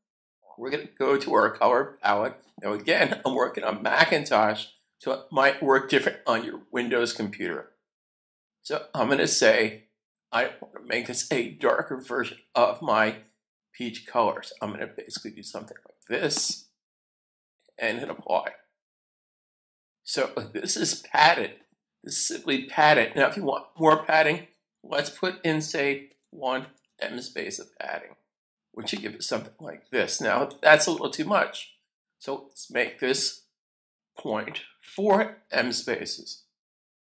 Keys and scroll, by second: 26.1-27.5 typing, 34.1-35.5 typing.